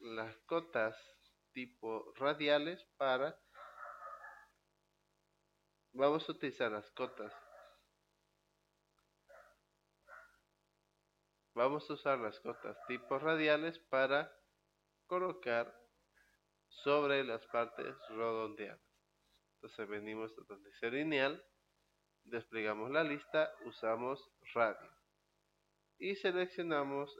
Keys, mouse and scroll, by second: 21.5 click, 24.0 click.